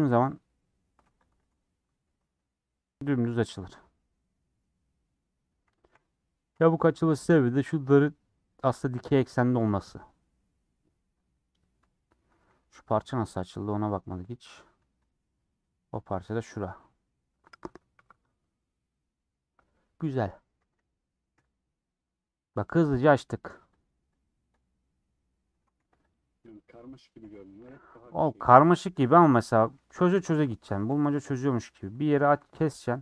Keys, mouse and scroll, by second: 0.0 u, 1.0 3, 1.1 click, 5.2 click, 8.3 middle click, 9.3-9.7 scroll down 3, 9.3 middle click, 9.8-10.2 scroll up 1, 10.2 scroll down 4, 10.4 middle click, 11.1 scroll down 5, 11.3-11.8 scroll up 7, 11.8 middle click, 11.9-12.4 scroll down 2, 12.5 a, 12.8 scroll down 5, 15.1 click, 15.2 scroll up 4, 19.9 scroll down 4, 20.1-21.4 middle drag, 21.4 /, 24.1-25.3 drag, 25.3 middle click, 25.5 Tab, 26.1 click, 26.5 click, 27.2 h, 27.7 click, 28.5 /, 29.0-30.0 middle drag, 30.0 scroll down 1, 30.3 middle click, 30.5 Tab, 30.7 2, 31.1 scroll up 2, 31.3-32.6 middle drag, 32.6 alt+click.